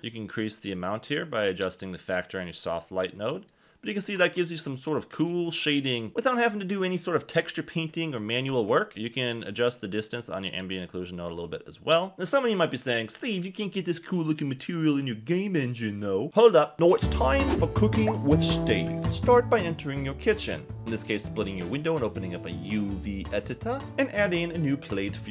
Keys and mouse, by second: 8.9-12.1 drag, 20.9 click, 22.4 click.